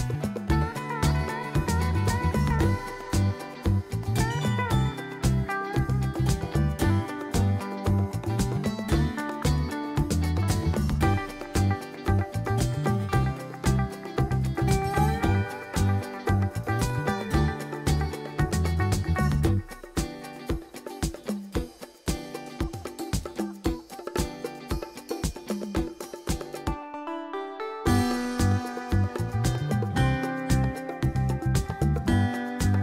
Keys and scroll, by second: 9.5 s.